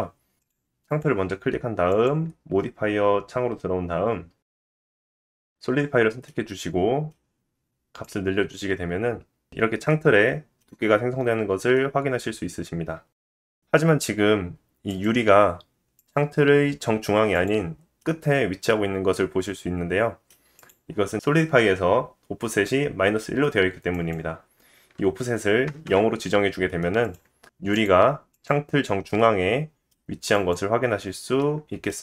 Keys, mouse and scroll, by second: 0.4-1.0 drag, 1.0 middle click, 1.9-13.3 drag, 6.3 middle click, 10.3 middle click, 11.4-13.2 scroll up 2, 13.3 middle click, 13.3 scroll up 1, 13.6 click, 13.7-14.6 middle drag, 14.6 click, 14.8-16.0 middle drag, 16.0 click, 16.1-19.2 middle drag, 19.2 click, 19.4-23.9 middle drag, 23.9-27.2 drag, 27.2-27.8 middle drag, 27.8 click, 27.9-28.9 middle drag, 28.9 click, 29.0-29.3 middle drag, 29.3-30.5 drag, 30.5-32.0 middle drag.